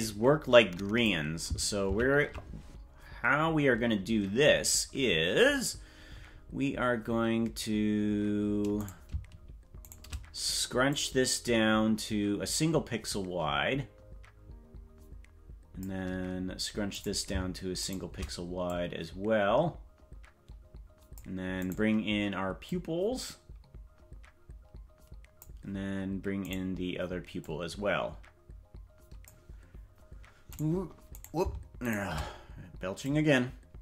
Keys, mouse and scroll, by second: 2.0 ctrl+z, 8.9 right click, 9.9 shift+right click, 10.8-15.8 drag, 17.1 right click, 17.8 shift+right click, 18.6-21.1 drag, 21.7 right click, 22.6-25.4 drag, 26.5 right click, 27.3-29.2 drag, 30.7 right click, 31.3 right click, 31.9 shift+right click, 33.0-33.8 drag.